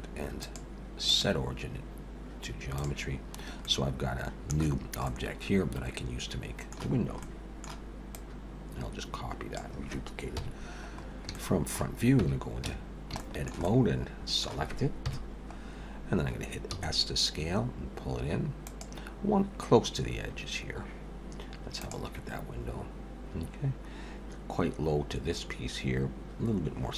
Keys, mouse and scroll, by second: 0.4 click, 3.4 scroll up 1, 3.6 middle click, 5.1 middle click, 7.2 middle click, 8.1 click, 10.4 KP_1, 10.9 scroll up 2, 11.3 shift+middle click, 12.2 Tab, 12.5 a, 13.2 shift+middle click, 13.6 middle click, 15.1 KP_1, 15.6 scroll up 1, 16.7 s.